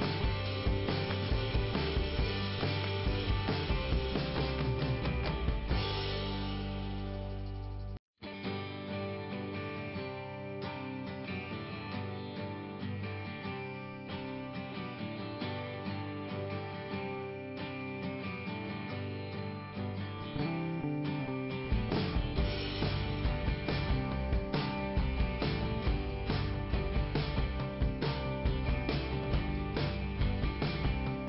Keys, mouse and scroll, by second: 0.7 click, 1.5 click, 2.2 click, 2.3 click, 2.8 click, 3.8 click, 5.4-6.2 scroll down 1, 6.8 click, 8.2 click, 9.5 click, 10.4 click, 11.6 click, 13.7 click, 14.7 click, 14.9 click, 15.0 double click, 17.5-18.1 scroll down 1, 19.4 click, 21.1 click, 25.8-26.8 scroll up 1, 28.1 click, 30.4 click, 31.1 click.